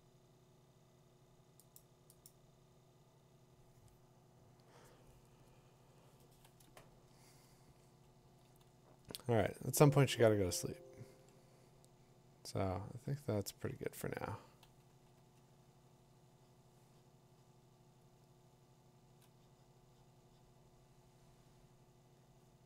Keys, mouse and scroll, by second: 1.8 click, 2.3 click, 7.7 click, 8.3 click, 11.0 click, 12.2 click, 12.3 click, 12.8 click, 19.0 click.